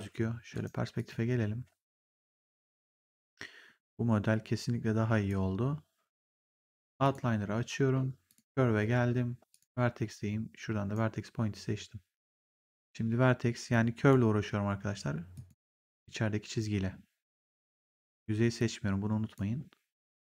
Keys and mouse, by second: 0.4 right click, 0.9 click, 3.1 click, 6.9 click, 8.2 click, 9.4 click, 10.0 right click, 12.2 click, 13.0 w, 13.6 click, 15.2 click, 17.4 click, 18.5 click, 19.9 click.